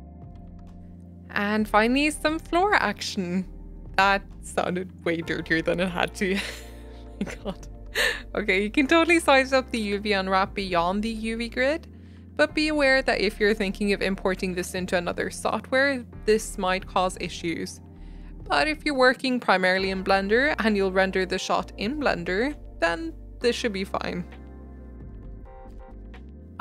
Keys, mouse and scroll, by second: 1.0 Tab, 1.2 s, 2.1 g, 2.4 Tab, 2.5 scroll down 1, 2.6-3.6 shift+middle drag, 3.6 Tab, 3.9 g, 4.5 s, 4.8 g, 5.9 Tab, 6.1 shift+middle click, 6.6 Tab, 6.9 r, 7.2 g, 7.7 s, 8.6 shift+middle click, 9.4 scroll up 1, 10.0-12.4 typing, 12.0 Tab, 12.3 Tab, 13.8 s, 14.2 g, 15.9 middle click, 16.1 Tab, 16.2-18.7 shift+middle drag, 18.7 Tab, 19.2 click, 19.6 shift+middle click, 20.1 u, 20.8 r, 21.7 g, 22.9 Tab, 23.0 shift+middle click, 23.4 scroll up 2, 23.6 Tab, 24.7 g.